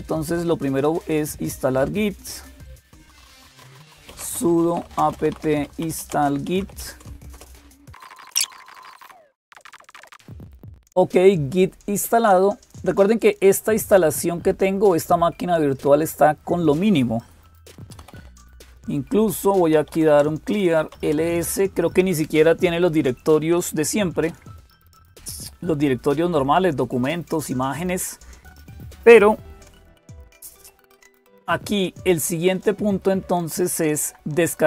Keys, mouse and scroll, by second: 0.0-34.6 typing, 1.6 click, 7.1 Return, 16.4 click, 32.3 click.